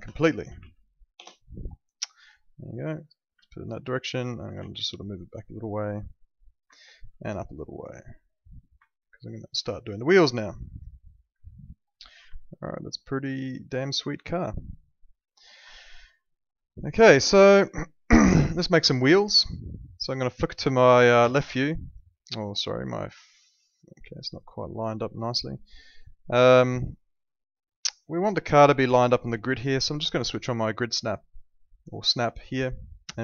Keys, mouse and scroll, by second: 0.0-1.1 typing, 1.2 Return, 2.4 alt+middle click, 3.4 alt+middle click, 4.5 w, 5.5 click, 6.7 alt+middle click, 7.8 click, 8.8 alt+middle click, 11.9 middle click, 12.8 alt+middle click, 15.7 alt+middle click, 17.1 alt+middle click, 19.1 alt+middle click, 21.2 l, 25.2 click, 32.1 click.